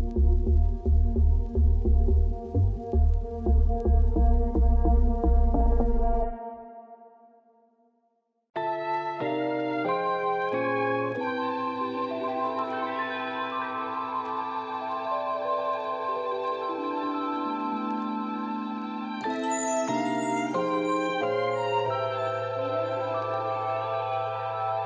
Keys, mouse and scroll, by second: 1.5 middle click, 1.6 2, 1.9 click, 3.1 shift+click, 3.2 shift+click, 3.4 shift+click, 3.7 ctrl+b, 6.8 click, 7.2 ctrl+b, 9.3 3, 9.4 click, 9.5 shift+click, 9.7 shift+click, 9.9 shift+click, 10.1 shift+click, 10.2 middle click, 10.6 g, 12.0 Tab, 12.2-13.4 middle drag, 13.4 KP_Divide, 13.6 middle click, 13.8 scroll down 2, 13.9 ctrl+s, 14.1 click, 14.2 middle click, 14.8 KP_Divide, 15.1 middle click, 15.2 scroll down 2, 15.4 Tab, 15.7 ctrl+r, 17.4 ctrl+r, 18.4 ctrl+r, 18.9 middle click, 19.1 s, 20.4-21.8 middle drag, 21.8 ctrl+r, 23.2 ctrl+r, 24.0 middle click, 24.2 ctrl+r.